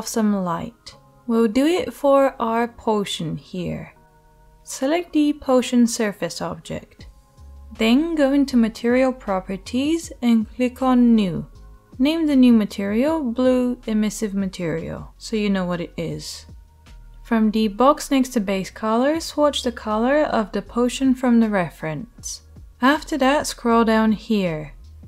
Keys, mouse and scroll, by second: 10.6-13.6 middle drag, 13.6 right click, 13.7-18.4 middle drag, 18.4-25.0 right drag.